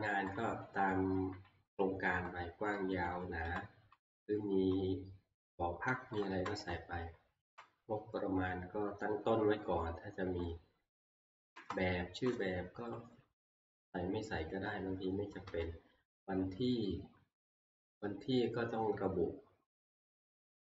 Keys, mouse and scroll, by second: 0.0 Right, 1.1 Right, 2.1 Left, 2.7 Right, 3.1 Right, 3.4 Left, 4.5 Left, 5.9 Right, 6.2 Right, 6.4 Left, 6.6 Right, 7.4 Left, 9.4 Right, 10.2 Right, 11.5 Left, 12.3 Right, 13.5 Left, 15.4 Left, 16.9 Right, 17.7 Left.